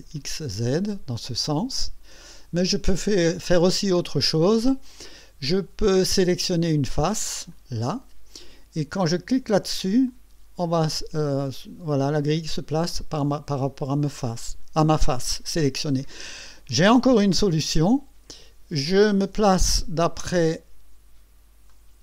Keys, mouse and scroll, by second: 0.2 click, 1.1-2.4 drag, 2.6 click, 4.0-4.8 drag, 7.5 click, 10.1 click, 11.2-14.3 drag, 17.5 click, 20.2 KP_1, 21.7-22.0 right drag.